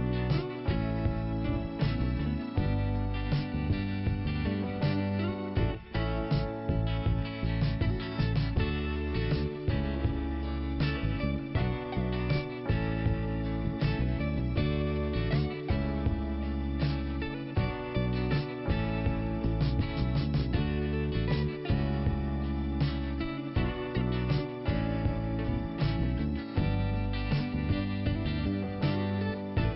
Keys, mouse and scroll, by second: 1.2 middle click, 1.8 f, 3.5 click, 4.2 click, 6.8 middle click, 10.8 click, 12.9 middle click, 14.2 click, 17.5 click, 17.7 click, 19.1 click, 20.7 click, 22.2 click, 23.4 click, 23.6 click, 24.0 click.